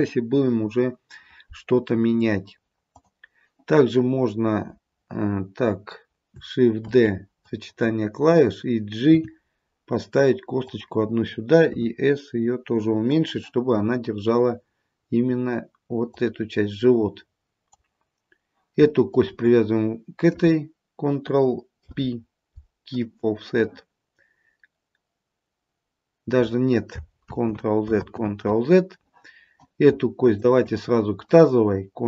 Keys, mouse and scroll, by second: 3.0 click, 7.0 shift+d, 9.2 g, 11.8 s, 16.1 click, 19.2 shift+click, 22.0 ctrl+p, 27.3 ctrl+z, 28.0 ctrl+z, 30.5 shift+click.